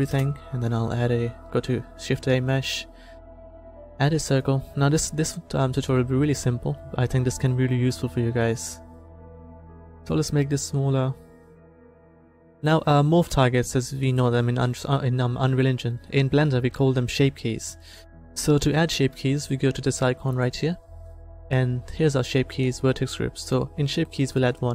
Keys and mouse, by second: 0.0 Delete, 0.7 shift+a, 4.8-7.9 middle drag, 9.1 s, 13.6 s, 17.6-19.6 drag, 20.4-24.7 drag.